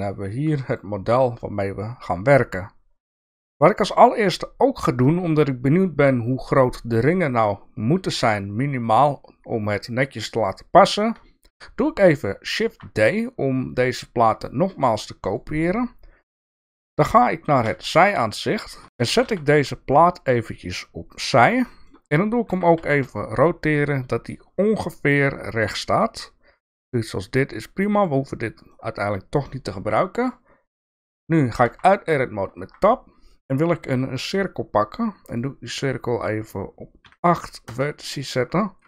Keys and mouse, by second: 18.7 shift+middle click, 18.7 shift+KP_3, 18.8 g, 19.0 g, 21.6 shift+middle click, 22.5 r, 28.9-29.9 middle drag, 30.8 middle click, 31.6 Tab, 32.5 shift+a, 35.3 click, 36.2-38.2 drag.